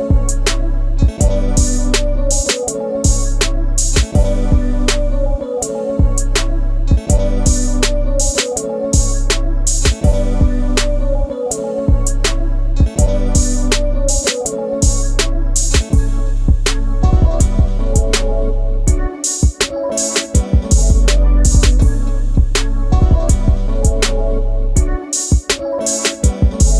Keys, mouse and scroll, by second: 3.8 shift+middle click, 4.5 m, 5.3 ctrl+click, 5.8 shift+click, 6.0 shift+middle click, 6.2 space, 6.3 Escape, 9.4 shift+middle click, 12.8 shift+middle click, 19.7 space, 21.3 middle click, 22.2 middle click.